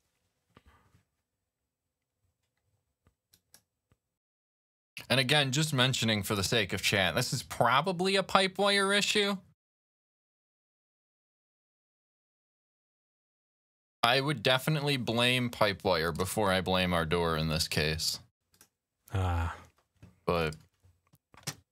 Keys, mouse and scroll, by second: 3.1 click, 3.4 click, 4.1 click, 18.3 click, 20.1 click, 21.2 click.